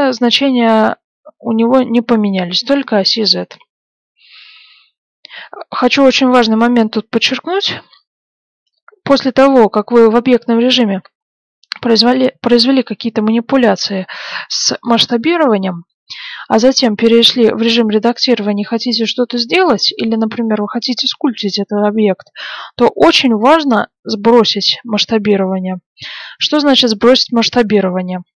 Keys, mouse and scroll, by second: 4.7 middle click, 5.9 middle click, 15.2-17.1 middle drag.